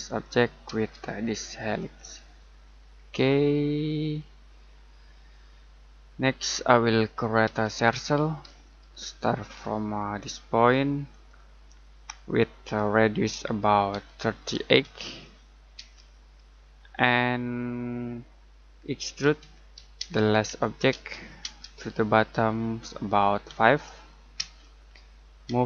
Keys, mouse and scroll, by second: 0.0 click, 0.7 space, 1.7 click, 2.7-3.3 scroll down 1, 3.7 middle click, 4.1-4.6 scroll down 1, 4.6 middle click, 6.6-7.0 scroll down 1, 7.0 middle click, 7.4 c, 8.4 space, 9.3-11.1 scroll up 1, 11.1 click, 14.5-15.7 typing, 16.7-17.2 scroll down 1, 17.3 middle click, 18.8-20.9 typing, 23.4 5, 24.3 space, 25.4 m.